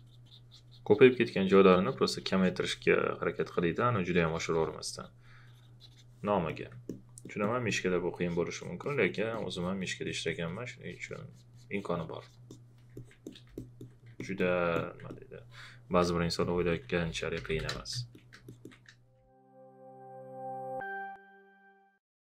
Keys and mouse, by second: 6.3 alt+click, 14.1 alt+click, 14.7 alt+click, 16.1-17.9 typing, 16.2 click, 16.7 alt+click, 18.4 alt+shift+click, 19.1 space, 19.2 click.